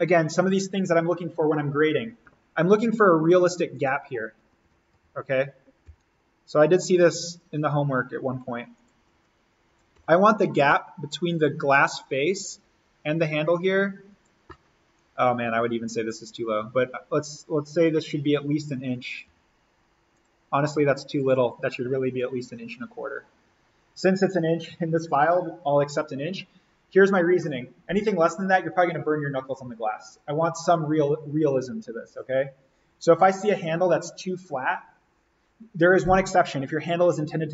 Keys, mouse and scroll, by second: 3.7 click, 4.6 s, 5.0 alt+n, 5.9 l, 7.2 click, 9.0 Escape, 10.0 l, 11.7 click, 14.4 click, 14.9 Escape, 16.0 click, 18.9 click, 19.3 d, 20.2 click.